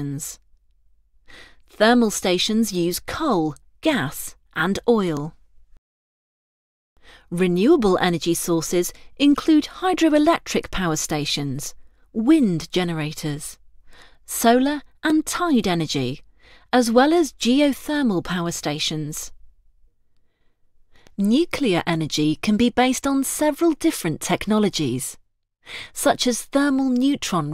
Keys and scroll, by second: 3.0 ctrl+Return, 4.2 ctrl+Return, 5.1 ctrl+Return, 9.9 ctrl+Return, 12.6 ctrl+Return, 14.2 ctrl+Return, 15.2 ctrl+Return, 18.6 ctrl+Return, 24.1 ctrl+Return, 26.8 ctrl+Return.